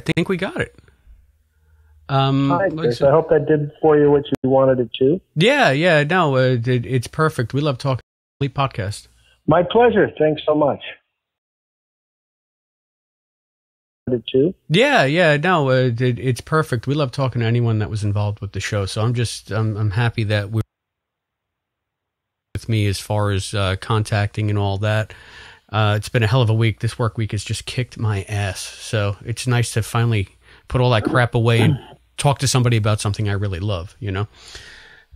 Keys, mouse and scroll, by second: 0.0 Delete, 0.5 click, 1.1 click, 1.6 click, 3.0-4.2 drag, 4.2 Delete, 5.4 click, 6.1 click, 6.7-7.7 drag, 7.9 space, 8.2 click, 8.4 space, 9.8 click, 10.3 click, 11.3 click, 12.2 ctrl+s, 13.2 space, 13.7 click, 14.0 space, 16.0 click, 19.1-20.3 drag, 21.8 click, 23.5 click, 27.7-29.1 drag.